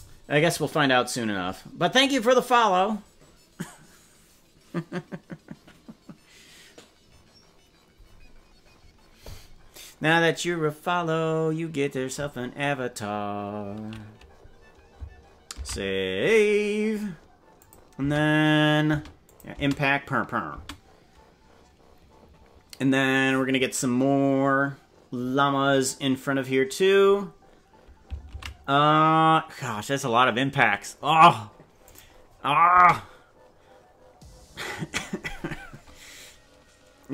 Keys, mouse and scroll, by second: 17.6 click, 18.0 space, 19.0 space, 19.2 click, 19.6 space, 20.6 space, 30.2 ctrl+s, 31.8 click, 32.8 space.